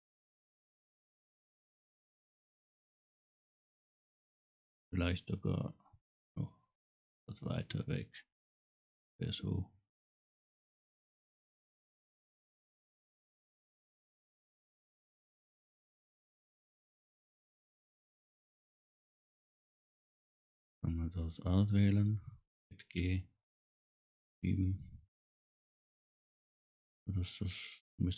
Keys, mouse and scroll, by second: 4.3 click, 6.7-10.0 drag, 10.8 click, 11.0 right click, 12.5 click, 17.9 click, 22.0 click, 23.0 g, 26.0 click.